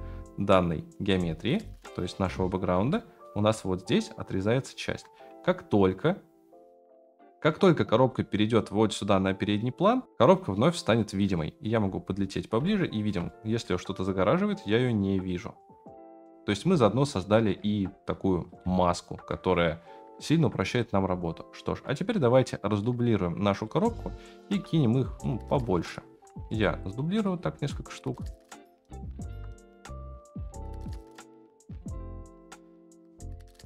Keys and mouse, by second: 1.9 click, 2.9-3.3 shift+middle drag, 11.3 middle click, 12.6-13.1 shift+middle drag, 13.2-16.3 middle drag, 16.3 KP_0, 18.9 ctrl+s, 21.9 click, 22.9 middle click, 23.3 click, 23.9-24.4 shift+middle drag, 25.1 click, 25.7 shift+middle drag, 26.1-30.5 typing, 31.6-33.6 typing.